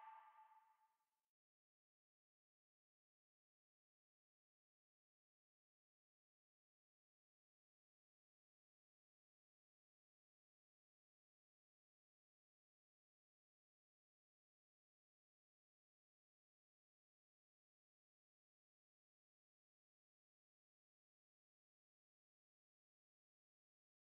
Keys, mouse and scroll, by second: 2.3 s, 7.7 s, 15.9-17.0 middle drag, 17.0 KP_1, 17.6 a, 17.9-23.9 middle drag.